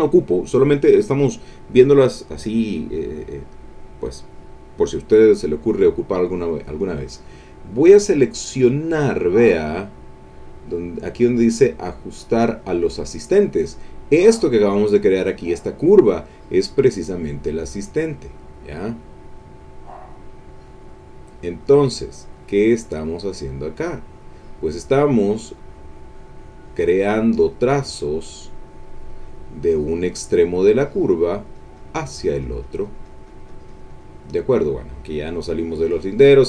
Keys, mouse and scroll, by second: 11.0 click, 16.7-18.2 drag, 18.8 click, 19.7 click, 20.7 click, 21.2 click, 21.6-30.0 drag, 30.2-34.4 drag, 35.5 click, 35.9-36.4 drag.